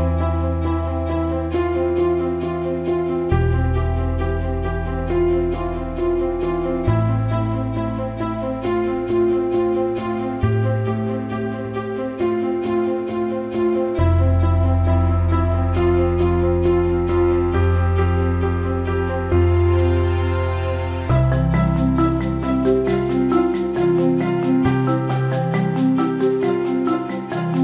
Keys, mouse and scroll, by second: 2.4 alt+middle click, 3.1 click, 4.0 alt+middle click, 4.8 alt+middle click, 5.1 alt+shift+middle drag, 6.9 alt+shift+middle drag, 7.3 alt+middle click, 9.7 alt+shift+middle click, 12.3 click, 13.5 click, 13.9 alt+middle click, 15.3 click, 17.1 click, 18.9 click, 21.0 drag, 21.7 click, 22.4-25.4 drag, 24.5 BackSpace.